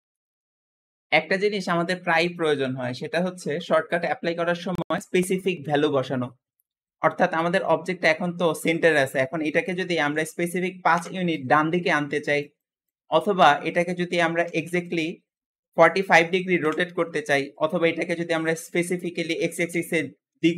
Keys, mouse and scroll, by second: 0.2-7.2 middle drag, 7.2-8.1 scroll up 1, 8.1-9.6 scroll down 1, 9.6 g, 15.3 ctrl+z, 15.4 r, 17.2 ctrl+z, 18.4 s.